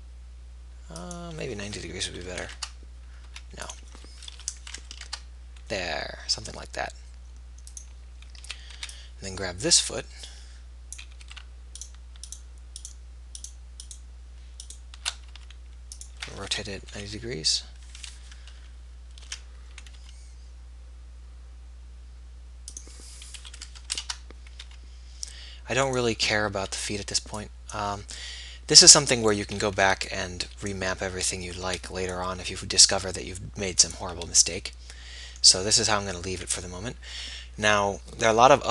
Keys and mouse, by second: 2.5 r, 3.7 g, 4.7 r, 6.8 g, 8.8 a, 12.1 click, 12.1 b, 12.6-15.6 middle drag, 15.6 g, 16.8 r, 20.3 g, 23.7-24.9 drag, 23.7 r, 24.9 g, 27.0 g, 28.2 g, 30.0 a, 32.6 b, 32.6 g.